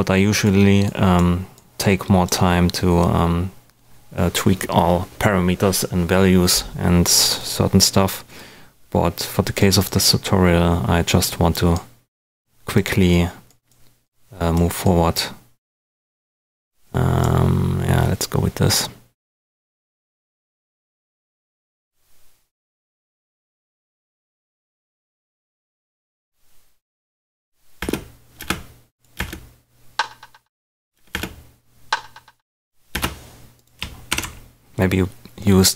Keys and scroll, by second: 27.7 space, 30.9 space, 32.9 space, 33.7 super+space, 34.0 super+d.